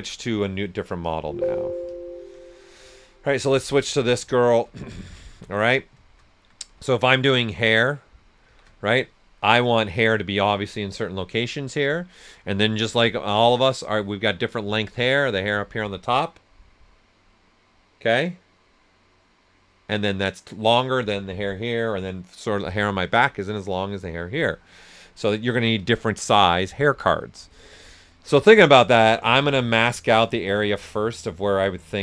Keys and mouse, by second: 0.9 click, 3.7 s, 3.8 click, 4.8 alt+right click, 6.3-7.1 typing, 6.8-8.4 drag, 8.4 shift+d, 8.8 right click, 11.7 right click, 29.0 ctrl+right click, 29.9-32.0 ctrl+drag.